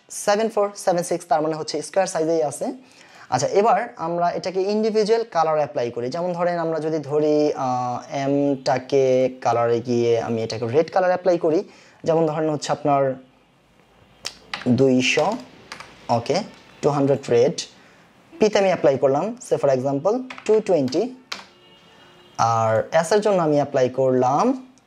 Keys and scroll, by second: 14.6 KP_2, 15.7 Return, 20.3 KP_2, 20.5 KP_2, 21.3 Return.